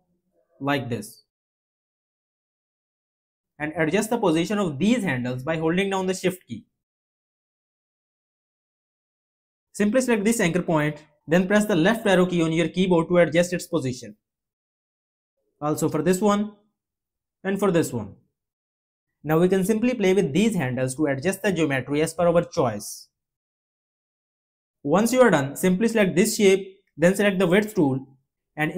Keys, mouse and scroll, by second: 6.1 click, 12.3 Left.